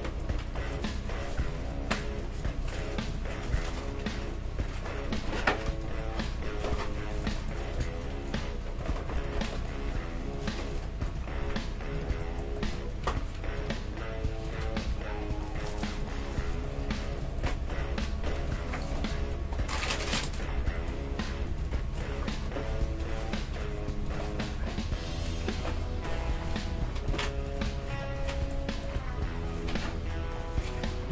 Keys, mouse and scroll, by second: 0.7 g, 2.4 right click, 2.9-4.9 drag, 3.7 g, 6.0-7.1 middle drag, 6.6 click, 7.8 g, 9.3 click, 9.7 g, 11.0-12.2 right drag, 11.4 g, 12.8-13.9 middle drag, 13.6 g, 14.4-20.5 right drag, 14.6 g, 16.8 g, 18.1 g, 19.2 g, 20.5-21.6 middle drag, 21.6-22.8 drag, 22.8-24.1 right drag, 24.3-25.6 middle drag, 24.6 g, 25.6-29.3 right drag, 26.7 g, 27.8 g, 28.3-30.7 middle drag.